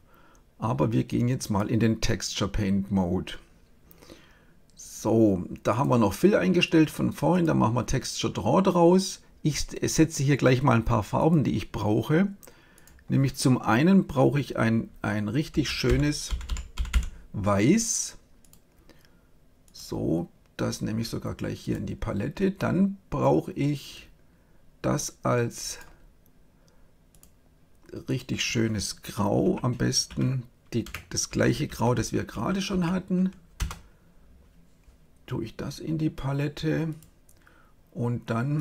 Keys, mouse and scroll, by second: 5.7-7.2 drag, 11.2-12.8 drag, 15.8 f, 16.8 f, 21.6-23.2 drag, 25.6-29.0 drag, 36.8-38.6 drag.